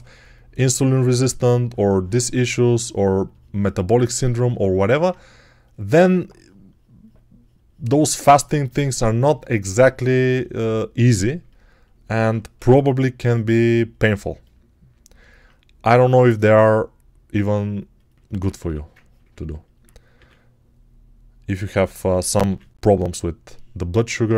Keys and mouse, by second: 12.4 g, 15.1 alt+right click, 18.5 1, 20.0 r, 23.6 ctrl+r.